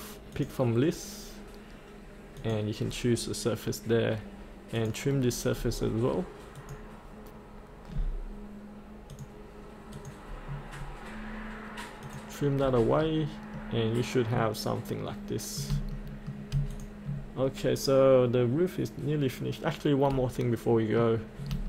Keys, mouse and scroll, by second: 5.6-6.6 scroll down 1, 6.6-7.7 drag, 12.6-13.0 scroll up 1, 13.6-15.7 middle drag, 15.9 shift+middle click, 16.7 click, 17.4-20.1 scroll down 1, 20.1 middle click, 21.2 scroll down 1.